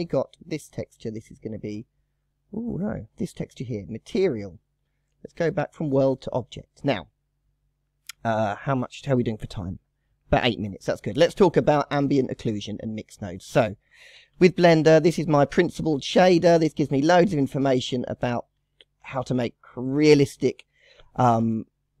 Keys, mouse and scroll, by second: 0.0 click, 1.2 click, 3.0 click, 5.4-6.8 drag, 6.8-7.7 scroll down 1, 7.7 click, 8.0-11.0 drag, 11.0 scroll down 3, 11.9 click, 12.7-14.2 drag, 14.2 shift+a, 15.4-16.1 scroll up 2, 16.1 shift+middle click, 16.4 scroll up 4, 16.9 shift+middle click, 17.0 shift+scroll down 1, 17.4 scroll up 2, 18.6-22.0 shift+middle drag.